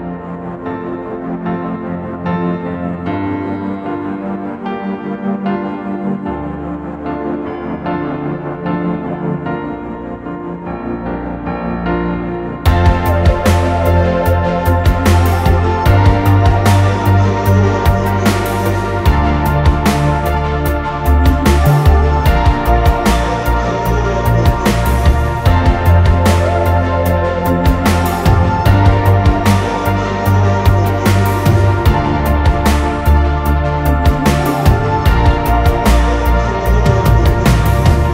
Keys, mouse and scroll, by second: 0.0 scroll up 1, 0.2 space, 0.7-1.1 scroll up 1, 1.1 f, 2.6 Return, 3.0 scroll down 1, 3.8 typing, 6.4 Return, 6.6 space, 7.3 scroll down 1, 7.5 scroll up 1, 7.7 middle click, 8.0 space, 8.7 scroll down 1, 11.9 right click, 13.6 middle click, 13.9-14.5 scroll up 1, 14.6 shift+click, 14.9 right click, 15.9-16.3 scroll down 1, 16.4 middle click, 17.0 right click, 18.7 ctrl+z, 19.4-19.7 scroll up 1, 19.7 double click, 21.2 double click, 21.7 right click, 27.3 right click, 28.2 middle click, 30.1 right click, 31.6 middle click, 32.1 space, 32.3 shift+click, 32.6 right click, 34.2 scroll down 1, 34.7 middle click, 35.0 scroll up 1, 36.1 Delete, 36.5 middle click, 37.7 scroll down 1, 38.0 scroll up 1.